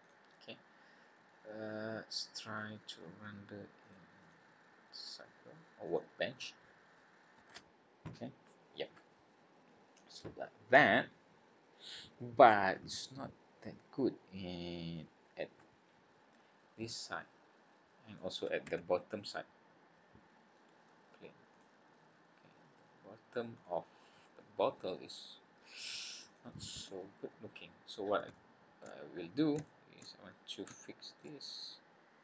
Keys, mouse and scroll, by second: 3.8 click, 4.2 click, 4.9 click, 19.1 middle click, 21.5 click, 22.0 scroll up 3, 23.5 click, 24.2 middle click, 26.3 click, 26.7 Tab, 27.3 scroll down 3, 27.7-28.1 scroll up 4, 28.3 shift+middle click, 28.9-29.5 scroll up 4, 29.6 shift+middle click, 30.1-30.5 scroll up 4, 30.8 shift+middle click.